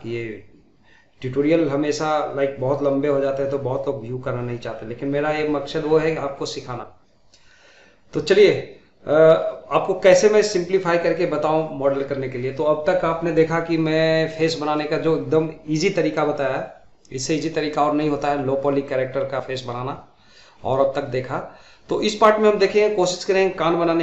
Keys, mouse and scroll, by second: 0.1 shift+middle drag, 0.1 scroll down 1, 0.3 shift+middle click, 0.4 click, 0.5-0.8 middle drag, 1.9 g, 2.3 scroll down 2, 2.3-2.8 middle drag, 2.4-3.3 scroll up 4, 3.0 shift+middle click, 3.3 click, 3.4 shift+middle click, 3.9 scroll up 3, 4.0 shift+middle click, 4.2 scroll down 2, 4.3 middle drag, 4.7 middle drag, 4.9 shift+middle click, 5.1 click, 5.3 click, 5.5 1, 5.7 click, 5.9 Tab, 5.9 scroll up 2, 6.1 shift+middle click, 6.2 shift+z, 6.3 middle click, 6.8 shift+click, 7.6 middle click, 8.2 shift+click, 8.3 middle click, 8.6 scroll down 2, 8.7 middle click, 8.9 shift+z, 8.9 scroll up 2, 9.0 middle click, 9.1 click, 9.4 scroll down 3, 9.5 middle click, 9.7 middle click, 9.9-10.3 scroll up 2, 10.0 middle click, 10.3 shift+middle click, 10.8 shift+click, 11.0 scroll down 4, 11.0 middle click, 11.2 middle click, 11.4 scroll up 5, 11.4 shift+middle click, 11.8 click, 12.1 middle click, 12.5 click, 12.7 middle click, 13.2 middle click, 13.5 scroll down 1, 13.6 middle click, 13.8 middle click, 14.2 scroll up 2, 14.5-14.9 scroll down 4, 14.5 middle click, 14.9 middle click, 15.0 scroll up 2, 15.2 shift+middle click, 15.4 g, 16.2 middle click, 16.9-20.1 typing, 17.1 click, 17.2 middle click, 17.8 scroll down 1, 17.8 middle click, 18.1 middle click, 18.7 scroll down 1, 18.7 middle click, 18.8 scroll up 2, 18.8 middle click, 19.1 middle click, 19.2 click, 19.3 middle click, 19.4 ctrl+click, 19.5 middle click, 19.7 middle click, 20.2 middle click, 20.4 click, 20.6 middle click, 20.8 ctrl+click, 20.9 scroll down 4, 21.0 ctrl+click, 21.1 scroll up 3, 21.2 middle click, 21.3 shift+z, 21.3 middle click, 21.5 ctrl+click, 21.6 middle click, 21.7 scroll up 1, 21.8 shift+middle click, 21.8 shift+z, 21.9 middle click, 22.0 click, 22.2 middle click, 22.7 shift+click, 22.8 middle click, 23.1 scroll down 1, 23.2 shift+middle click, 23.5 click, 23.7 scroll down 1, 23.8 shift+middle click.